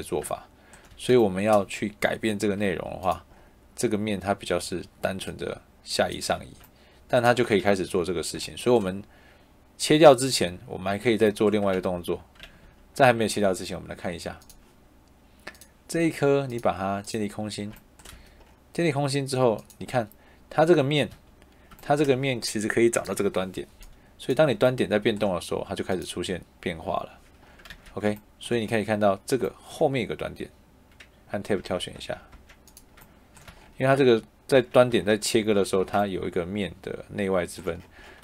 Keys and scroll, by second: 0.8 Escape, 7.5 ctrl+z, 11.7 ctrl+z, 18.0 Escape, 21.0 Escape, 27.6 ctrl+z, 31.5 Tab, 33.4 Escape, 34.4 Tab, 35.7 Escape.